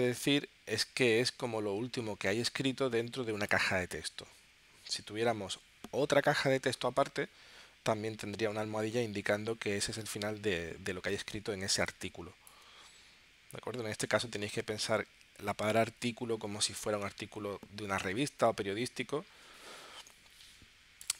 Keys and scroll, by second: 11.4 space.